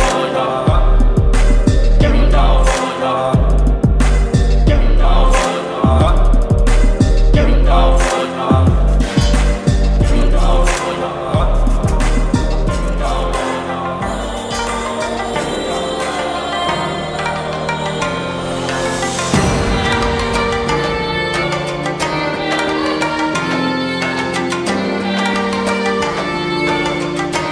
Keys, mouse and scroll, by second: 0.0 shift+y, 0.8 ctrl+a, 2.8 click, 6.3 click, 9.2 v, 9.5 ctrl+t, 11.1-13.0 shift+drag.